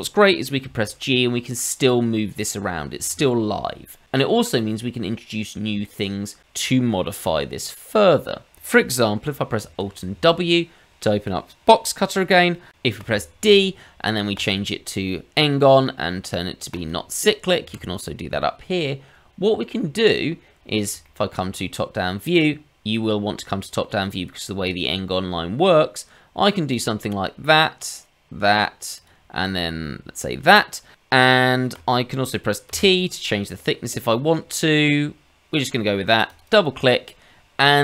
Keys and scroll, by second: 0.6 g, 9.6 alt+w, 13.0 d.